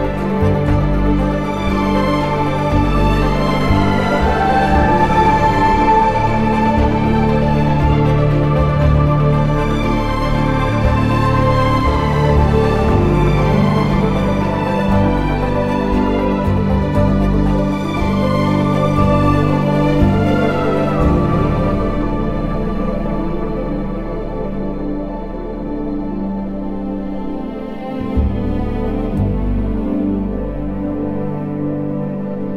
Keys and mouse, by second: 8.5 Tab, 9.4 KP_3, 12.2 3, 12.8 click, 13.8 shift+d, 14.7 click, 15.6 r, 16.4 click, 16.6 2, 17.8 g, 18.1 z, 21.1 2, 22.4 g, 22.7 x, 23.3 Escape, 23.9 g, 24.1 y, 24.5 click, 24.7 2, 25.9 s, 29.4 ctrl+KP_Add, 29.5 ctrl+KP_Add.